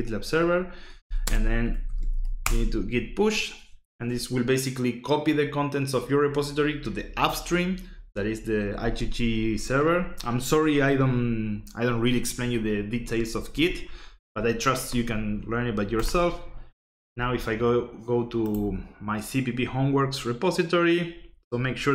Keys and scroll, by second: 0.6-2.6 typing.